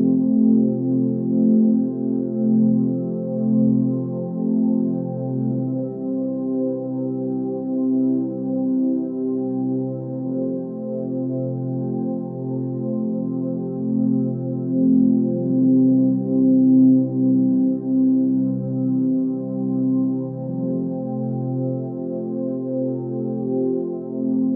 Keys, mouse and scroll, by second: 0.8 ctrl+space, 8.2 ctrl+z, 8.6 x, 11.0 x, 13.2 x, 14.3 x, 16.4 x.